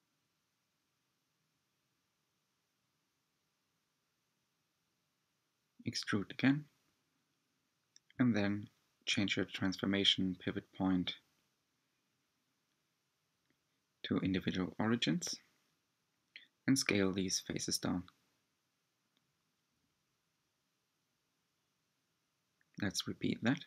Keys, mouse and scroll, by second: 6.5-7.8 middle drag, 7.8 s, 11.3-13.4 drag, 13.4 s, 19.5 e, 20.1 s, 20.5-21.0 drag, 21.0 s, 22.4 click, 22.9 s.